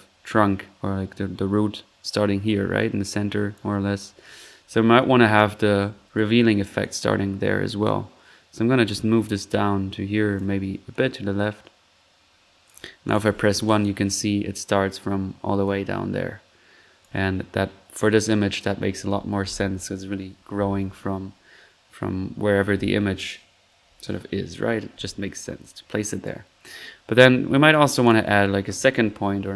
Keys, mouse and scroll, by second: 3.0 click, 6.8-10.5 drag, 10.9-12.8 drag, 13.2 1, 13.6-13.9 drag, 15.6-17.0 drag, 17.2-17.5 drag, 24.9-25.4 middle drag, 26.0 click, 27.6-27.9 drag, 28.0 click, 28.3-29.4 typing.